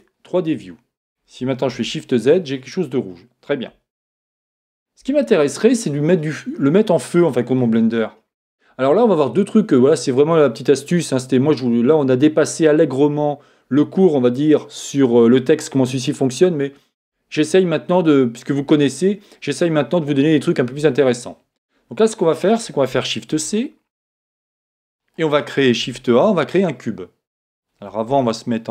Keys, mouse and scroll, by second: 0.0 click, 1.7 shift+z, 4.1 shift+z, 5.2 middle click, 6.7 middle click, 6.9-8.5 scroll up 1, 8.5 scroll up 1, 8.6-23.3 middle drag, 23.3 shift+c, 24.1-26.9 middle drag, 25.8 shift+a.